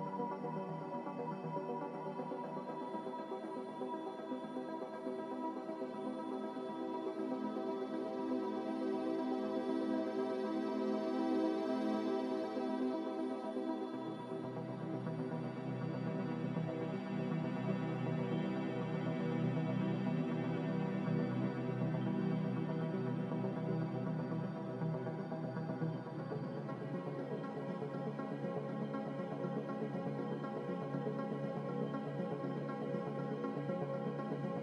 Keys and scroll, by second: 2.2 ctrl+c, 2.4 ctrl+v, 9.2 ctrl+c, 9.4 ctrl+v, 15.2 ctrl+v, 20.1 a, 29.3 x, 31.5 z, 34.3 5, 34.5 Return.